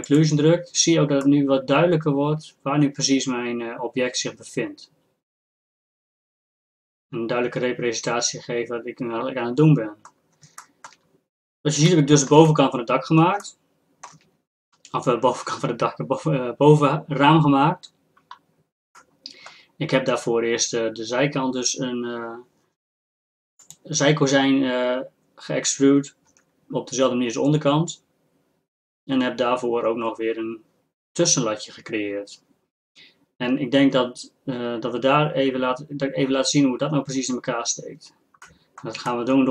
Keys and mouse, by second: 0.1-1.9 drag, 1.9 middle click, 6.1-7.3 middle drag, 7.9 middle click, 8.1 middle click, 8.6 middle click, 8.9-10.2 middle drag, 10.8-12.8 drag, 13.0-15.4 drag, 15.4-19.0 middle drag, 19.0-20.9 drag, 20.9-23.6 middle drag, 23.6-26.3 drag, 26.3 Tab, 30.0-39.5 middle drag.